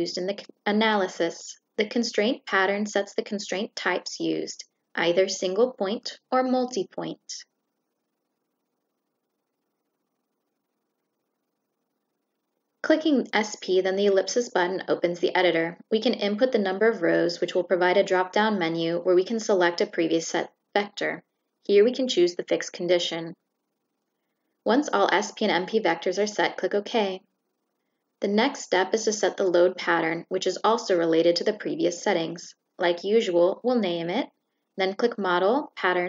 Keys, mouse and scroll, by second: 13.3 click, 14.6 click, 16.3 click, 17.8 click, 24.4 click, 26.2 click, 28.8 click, 29.6 click, 34.6 click.